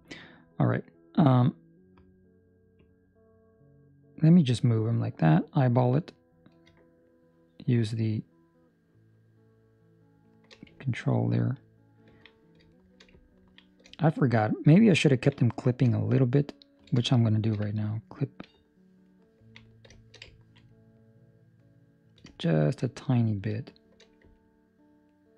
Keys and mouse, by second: 0.3 middle click, 2.7 click, 10.9 ctrl+middle click, 12.7 shift+middle click, 13.1 ctrl+middle click, 14.3 shift+middle click, 14.9 ctrl+middle click, 17.0 shift+middle click, 17.7 ctrl+middle click, 19.9 shift+middle click, 20.1 shift+middle click, 20.2 ctrl+middle click, 20.7 middle click, 22.6 shift+middle click, 22.9 middle click, 23.5 shift+middle click, 24.3 ctrl+middle click, 25.1 ctrl+middle click.